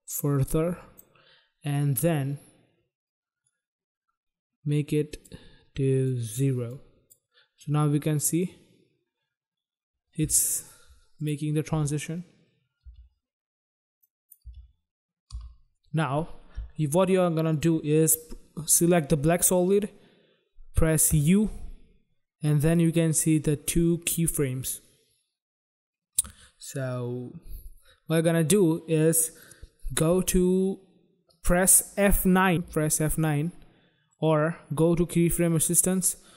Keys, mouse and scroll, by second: 3.4 click, 5.9 click, 6.7 click, 8.1 click, 11.0 click, 11.2 click, 11.6 space, 13.0 space, 14.0 click, 14.4 space, 15.2 space, 17.4 click, 20.8 u, 23.1 click, 32.5 F9, 32.7 click, 34.2 right click, 34.3 right click.